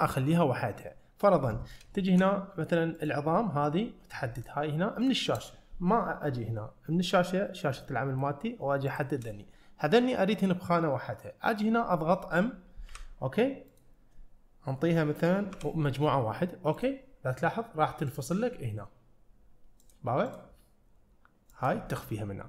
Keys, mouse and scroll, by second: 0.9 middle click, 2.0 shift+middle drag, 3.0 click, 3.4 middle click, 4.4 shift+click, 5.1 shift+click, 7.9 shift+middle click, 8.9 shift+click, 12.9 m, 18.1-20.0 drag, 20.3 click, 21.6 click.